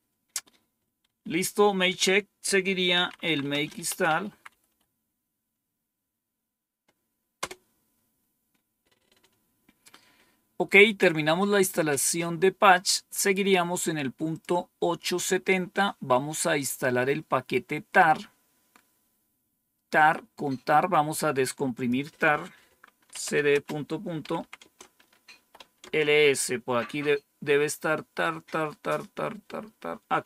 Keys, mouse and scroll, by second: 0.9 Home, 1.8 End, 2.6-4.9 typing, 10.7-11.6 scroll down 3, 14.2 click, 19.9 click, 21.7 click, 22.8-26.0 typing, 24.5 Return.